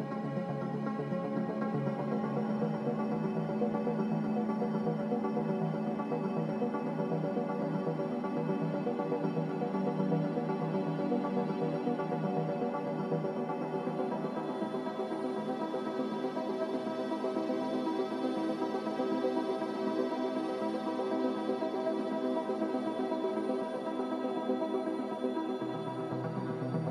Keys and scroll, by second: 2.9 ctrl+g, 6.5 x, 7.6-11.7 typing, 14.0-14.7 typing, 15.7 Return, 18.5-21.1 typing, 23.6-24.3 typing.